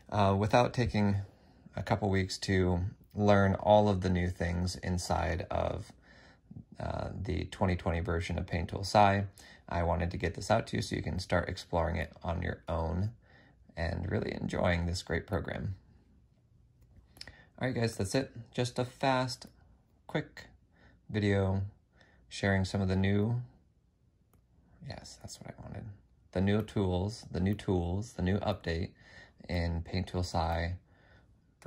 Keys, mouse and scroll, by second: 15.0 typing, 21.9 F6, 24.9 F6.